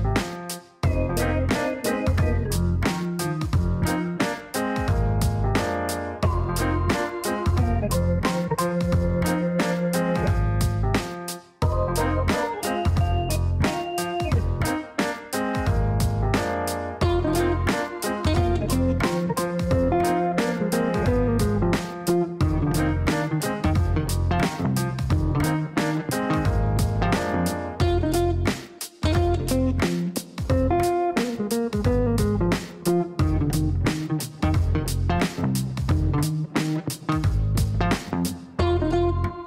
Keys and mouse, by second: 0.7 click, 1.2 click, 3.0 click, 4.4-5.7 typing, 5.7 Down, 6.8-7.7 typing, 8.5 Down, 8.7 Down, 8.8 Down, 9.8-12.7 typing, 9.9 KP_Add, 13.6 click, 14.5 click, 19.0 click, 21.3 click, 21.8 space, 22.5 click, 25.6 click, 26.9 click, 29.5 click, 32.4 space, 34.5 click, 35.6 click, 37.4 click, 38.5 click.